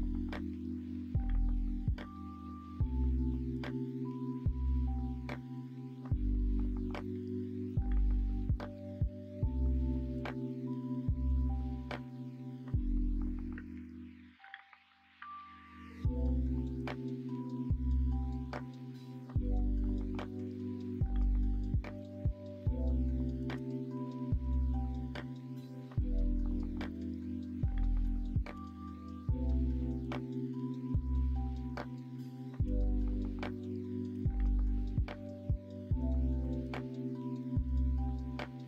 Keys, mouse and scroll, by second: 0.6 3, 8.2 middle click, 10.0 middle click, 11.6 middle click, 12.1 middle click, 13.7 shift+d, 16.6 middle click, 17.5 middle click, 18.3 middle click, 19.4 s, 20.4 s, 20.7 scroll up 1, 20.8 middle click, 21.9 l, 23.5 h, 23.8 middle click, 25.9 2, 28.5 f, 29.6 middle click, 32.6 f, 34.1 ctrl+f, 35.6 l, 36.4 shift+n, 37.2 ctrl+r.